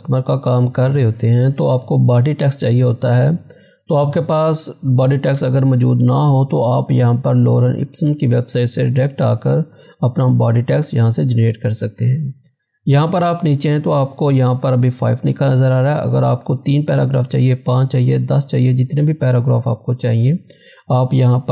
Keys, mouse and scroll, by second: 8.9 click, 9.0 scroll down 1, 15.9-18.8 drag.